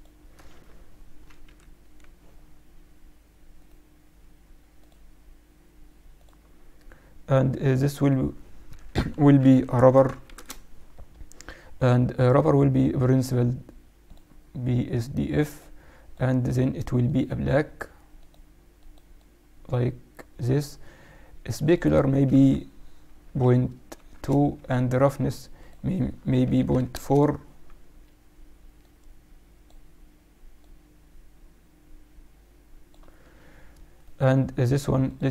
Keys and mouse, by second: 0.5 click, 0.6 z, 1.1 z, 1.4 KP_Divide, 3.5-5.1 right drag, 7.6-9.7 drag, 9.8 b, 12.1-14.0 drag, 15.5-18.9 drag, 21.5-23.3 drag, 25.5-27.2 drag, 28.8-32.4 drag, 33.9-35.3 right drag.